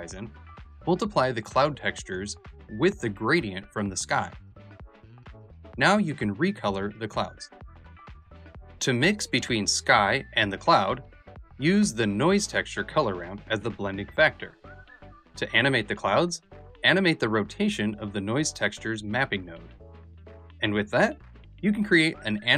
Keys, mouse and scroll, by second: 8.3 ctrl+space, 8.3-8.6 scroll down 4, 8.3 ", 8.6 shift+middle click.